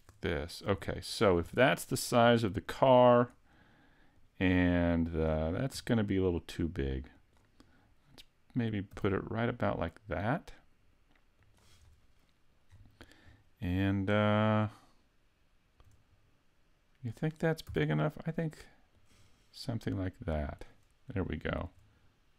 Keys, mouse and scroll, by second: 0.3-0.9 scroll down 1, 0.9 shift+middle click, 2.7 click, 4.2 click, 5.8 s, 7.3 click, 8.9 g, 11.6 click, 11.8 scroll down 3, 12.7-13.5 scroll up 5, 13.5 shift+middle click, 17.7 s, 19.1 click, 19.9 click, 21.3 shift+middle click.